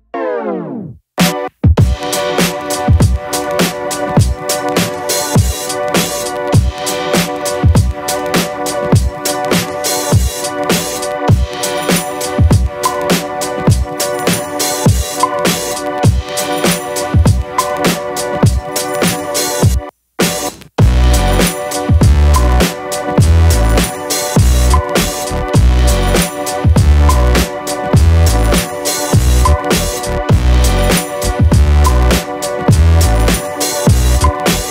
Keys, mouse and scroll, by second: 1.3-2.7 drag, 1.6 g, 3.2 click, 3.7 alt+click, 4.0-4.8 alt+drag, 5.1-6.0 alt+middle drag, 7.2-8.5 drag, 9.3-10.5 alt+drag, 11.0 click, 11.8-15.3 drag, 16.3 click, 17.2-18.3 alt+drag, 18.6 alt+middle drag, 19.3 middle click, 19.8 shift+a, 24.1 click, 24.5 q, 25.8 shift+a, 31.4 click, 32.3-33.1 drag.